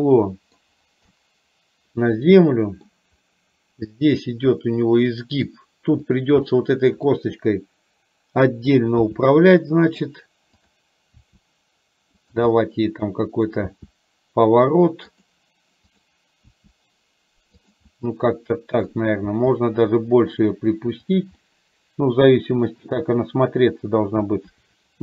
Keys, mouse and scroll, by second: 1.2-2.6 middle drag, 2.7 middle click, 4.1-5.4 middle drag, 6.2 click, 6.7 middle click, 9.2 r, 11.2 r, 12.6-13.6 middle drag, 15.9 click, 16.6 r, 17.9-18.9 middle drag, 19.3 r, 21.4-22.8 middle drag.